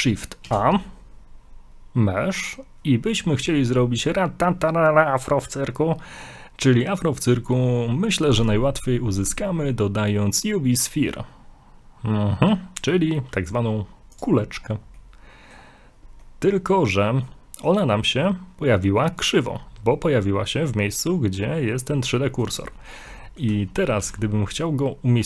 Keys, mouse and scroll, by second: 0.5 shift+a, 14.6-15.0 scroll down 5, 15.0 middle click, 15.7 scroll up 2, 16.2 middle click, 16.3 middle click, 17.9 middle click, 19.6 scroll up 2, 22.2 middle click, 23.2 shift+middle click, 23.2 middle click.